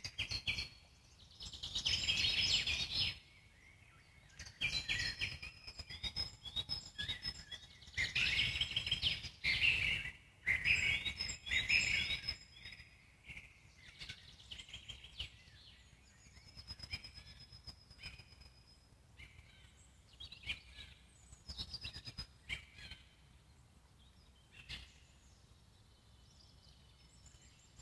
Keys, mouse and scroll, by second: 0.2-1.7 alt+middle drag, 1.7-2.0 scroll down 1, 2.0 alt+middle click, 2.7-3.0 scroll up 2, 3.0 alt+middle click, 3.2 scroll down 1, 3.3 z, 3.8 click, 4.2 z, 4.7 alt+middle click, 5.3 g, 8.0-9.1 alt+middle drag, 9.1 scroll down 3, 9.3 alt+middle click, 9.9-10.5 scroll up 2, 10.5 z, 10.9 click, 11.4 z, 11.8 alt+middle click, 12.4 click, 12.6 z, 13.1 click, 13.5 z, 15.0-16.5 alt+middle drag, 16.5 Tab, 16.7-17.2 scroll down 1, 17.2 click, 17.5-18.8 alt+middle drag, 18.8 click, 19.5-23.1 alt+middle drag, 24.1 shift+click, 25.4 ctrl+j.